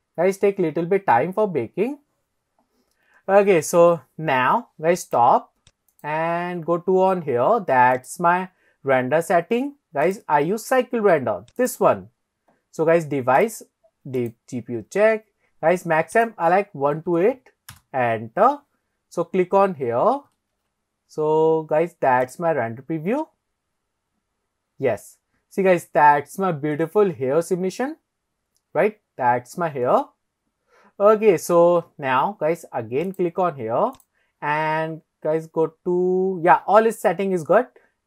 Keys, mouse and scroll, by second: 6.9 click, 7.9 click, 10.0-11.7 drag, 13.4-14.3 drag, 16.2-17.6 drag, 21.9 ctrl+s, 22.5 click, 33.2 click, 34.0 click.